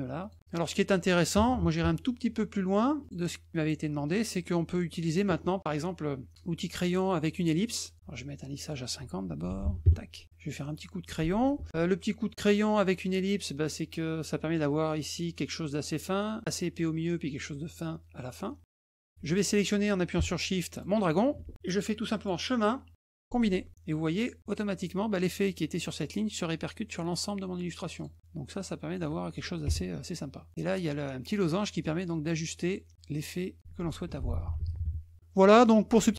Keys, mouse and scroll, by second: 0.2 shift+click, 0.7 middle click, 3.0 click, 3.9 middle click, 4.4 middle click, 6.9 click, 7.8 click, 8.5 click, 9.4 ctrl+a, 11.5 F2, 13.7 click, 18.5 click, 20.7 shift+click, 22.2 click, 23.4 click, 27.9 click, 28.1 click, 31.4-33.5 drag.